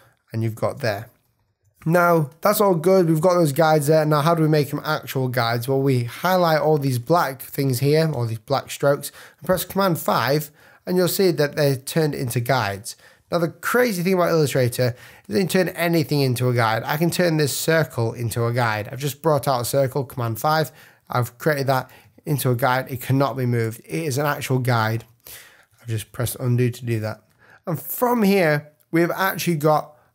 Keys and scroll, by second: 1.2 super+-, 9.9 super+5, 13.2 |, 17.4 alt+shift+c, 19.0 v, 26.2 super+-, 26.9 super+space, 27.9 space.